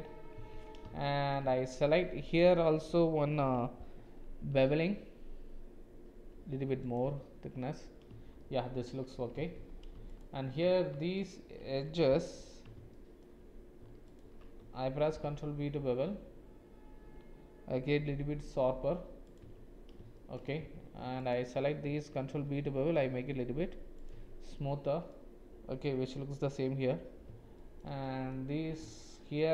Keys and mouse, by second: 0.4 Tab, 1.0 shift+click, 2.3 alt+click, 4.5 ctrl+b, 7.1 Tab, 8.4 shift+click, 9.4 Tab, 11.2 alt+shift+click, 12.9 alt+shift+click, 15.2 ctrl+b, 19.4 Tab, 20.1 shift+click, 20.6 Tab, 22.3 ctrl+b, 24.2 Tab, 24.5 middle click, 24.8 click, 27.5 shift+click, 28.0 middle click, 29.0 shift+click.